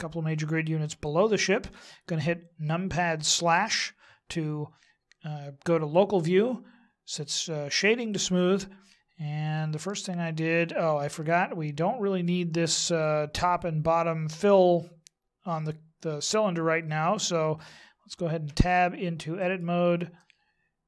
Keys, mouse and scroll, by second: 3.1 KP_Divide, 7.1 click, 9.9 middle click, 18.5 Tab, 19.3 right click, 20.1 middle click.